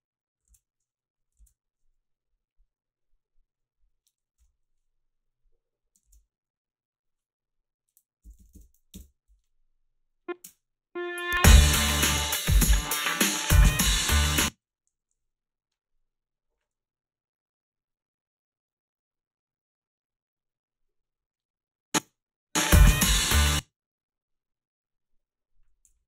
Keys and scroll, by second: 1.5 ctrl+z, 4.4 Delete, 6.1 alt+shift+s, 8.0-9.1 typing, 10.4 space, 14.2-15.4 typing, 22.0 space, 23.2 space, 25.9 f.